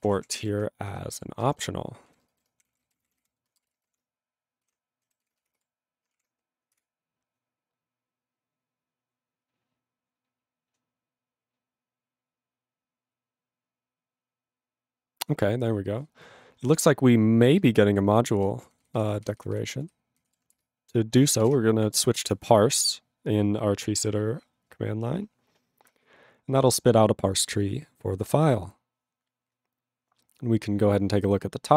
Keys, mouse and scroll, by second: 0.0-0.8 typing, 0.9 ctrl+f, 1.2 ctrl+-, 1.5 ctrl+b, 2.0 ctrl+e, 2.4-4.6 typing, 5.2 ctrl+s.